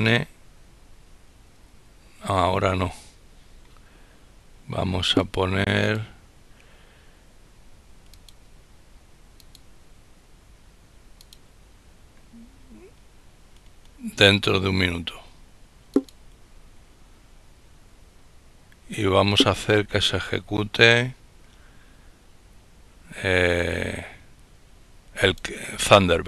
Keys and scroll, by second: 0.0 Up, 0.7 Down, 1.4 Tab.